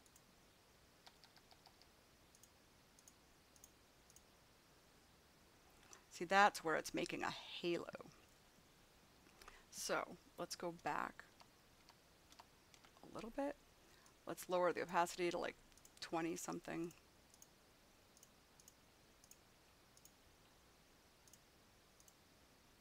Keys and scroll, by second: 0.9 ], 10.7 ctrl+z.